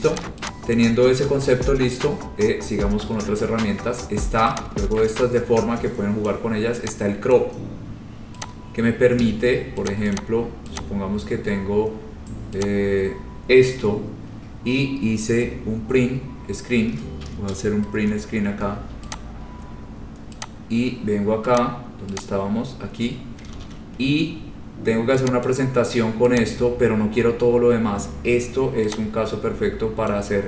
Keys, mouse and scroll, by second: 0.3 click, 0.9 click, 1.2-2.8 scroll, 6.4 click, 7.5 click, 8.8 click, 10.0 click, 10.3 click, 11.0 click, 11.4-12.0 scroll, 12.8 click, 13.4-14.3 scroll, 18.1 Print, 18.5 scroll, 19.3 click, 20.6 click, 21.7 click, 22.4 click, 22.9 scroll down 5, 23.2 scroll up 3, 23.7 ctrl+v, 24.1-25.1 scroll, 25.6 click, 25.9 scroll, 26.7 click, 27.7 scroll, 30.2 click.